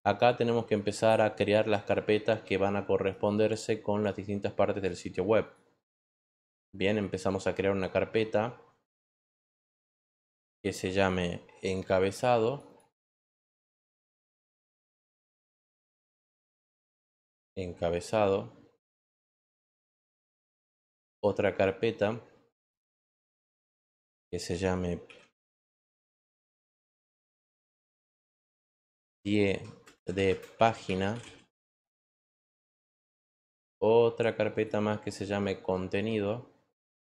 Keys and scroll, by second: 13.9-16.2 typing, 24.7-25.5 typing, 26.7-31.8 typing.